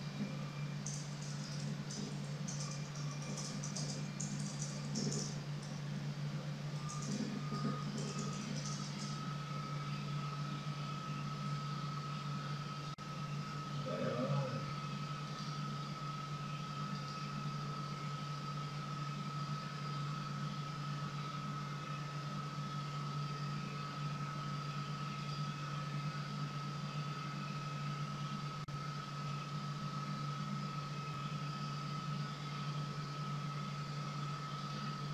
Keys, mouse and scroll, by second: 0.8-5.6 typing, 6.8 space, 7.5 Return, 8.0-8.6 typing, 10.2 typing, 11.5 BackSpace, 15.3 click, 16.9 click, 20.2-20.5 scroll down 1, 22.4-23.7 scroll up 1, 25.4 click, 27.1-28.1 scroll down 1, 29.5-30.7 scroll down 1, 34.6 click.